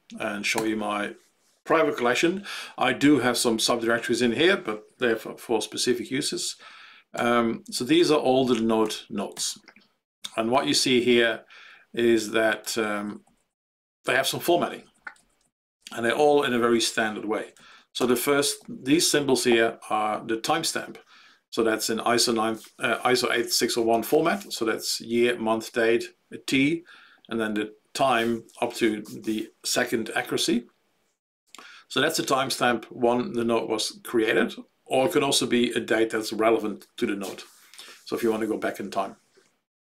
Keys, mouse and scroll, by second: 7.1 Page_Down, 7.9 Page_Down, 8.8 Page_Down, 9.3 Page_Down, 12.6 Right, 12.8 Right, 13.0 Right, 13.2 Right, 13.4 Right, 14.1 ctrl+Right, 14.2 ctrl+Right, 14.4 ctrl+Right, 14.6 ctrl+Right, 14.9 ctrl+Right, 15.1 ctrl+Right, 15.4 ctrl+Right, 15.6 ctrl+Right, 17.5 Right, 17.9 ctrl+space, 18.5 ctrl+Right.